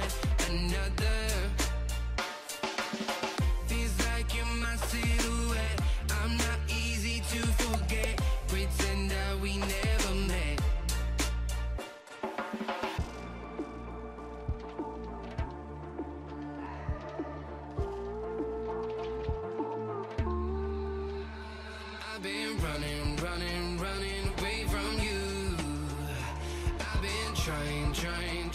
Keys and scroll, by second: 13.1 i.